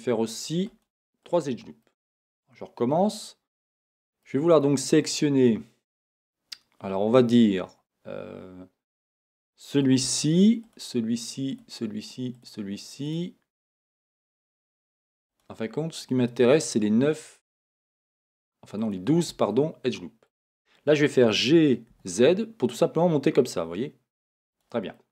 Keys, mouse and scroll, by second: 1.3 click, 2.1-3.9 middle drag, 7.8-9.0 middle drag, 9.0 click, 10.6 click, 11.5 shift+click, 13.0 shift+click, 13.7 click, 14.3 click, 15.3 click, 16.6 click, 17.3 click, 18.0 click, 18.8 shift+click, 19.5-24.6 middle drag, 21.0 g, 24.6 click, 24.9 middle click.